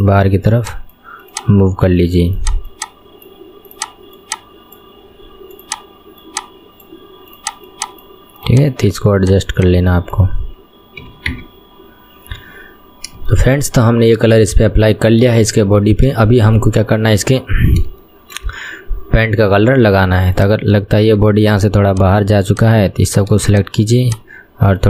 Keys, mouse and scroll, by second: 0.7 click, 2.5 click, 2.9 click, 3.9 click, 4.3 click, 5.7 click, 6.3 click, 7.5 click, 7.9 click, 8.6 click, 9.3 click, 9.7 click, 11.1 KP_1, 11.4 Tab, 11.9-13.0 scroll down 1, 13.0-13.5 scroll down 8, 13.5 shift+middle click, 14.1 scroll down 1, 14.5-15.2 shift+middle drag, 15.2 scroll down 1, 15.6-20.5 shift+middle drag, 20.5 click, 21.2 Tab, 21.5-22.0 scroll up 3, 22.0 click, 22.9 click, 23.6 ctrl+shift+click.